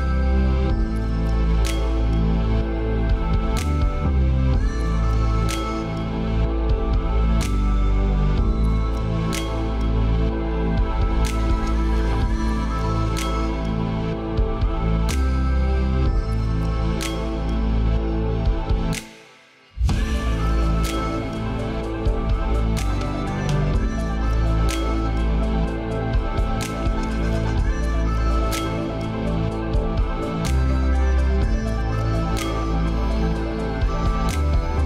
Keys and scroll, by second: 3.1 ctrl+space, 19.3 ctrl+a.